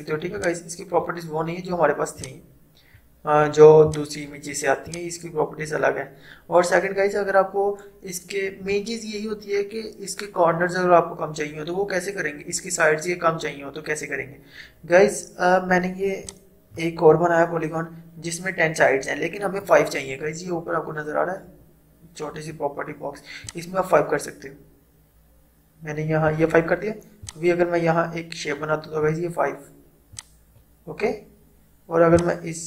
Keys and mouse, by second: 0.4-16.3 drag, 16.3-19.3 drag, 23.5-32.6 drag.